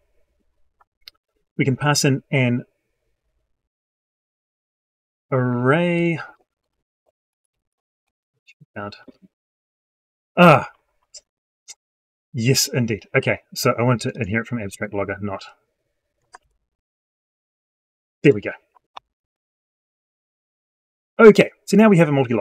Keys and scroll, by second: 6.5 ctrl+shift+Down, 7.9 ctrl+F9, 14.5 ctrl+c, 16.2 ctrl+v, 18.8 ctrl+F9.